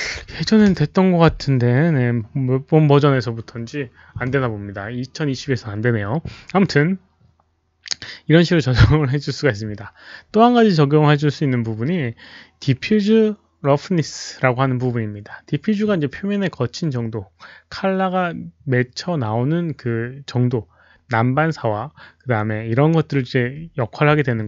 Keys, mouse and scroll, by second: 0.1 Return, 0.1 click, 0.1-0.5 typing, 0.5 Return, 0.5 click, 6.4 Return, 6.6 click, 6.6-7.7 typing, 6.8 Return, 7.7 Return, 11.3 Return.